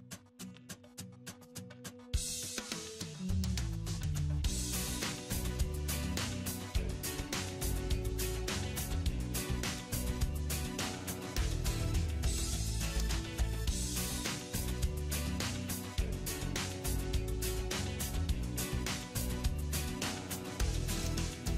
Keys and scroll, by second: 20.4 alt+w.